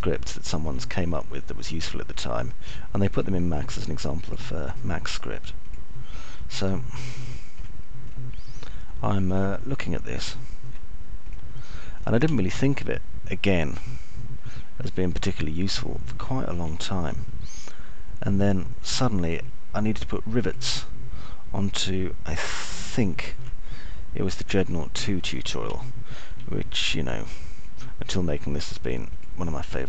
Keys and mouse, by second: 0.8 alt+middle click, 1.9 middle click, 2.4 alt+middle click, 6.8 ctrl+click, 9.3 alt+middle click, 10.4 middle click, 14.9-19.1 alt+middle drag, 19.4-21.3 middle drag, 28.3 alt+middle click.